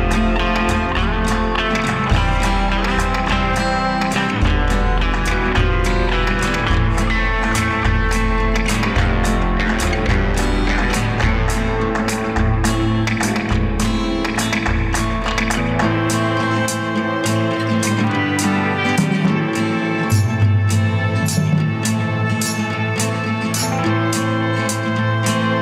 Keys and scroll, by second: 0.9 ctrl+=, 1.3 space, 6.5 ctrl+0, 10.5 Escape, 11.5 Delete, 20.6 space, 21.5 space, 22.4 ctrl+a.